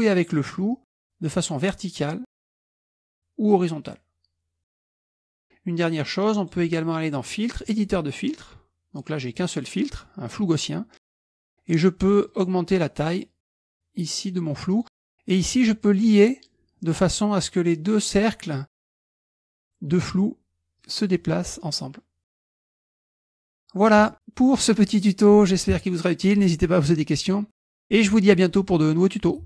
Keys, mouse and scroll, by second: 0.7-2.8 drag, 3.5-5.4 drag, 6.4 click, 7.7 click, 9.4 click, 12.3-15.2 drag, 16.1 click, 20.8-24.1 drag, 24.8 click, 25.7 click.